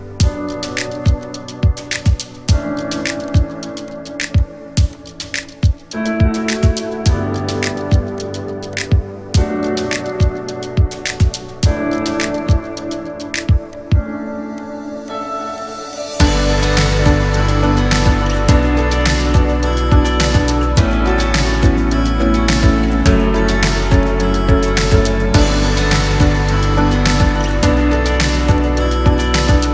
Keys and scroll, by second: 6.8 ctrl+z.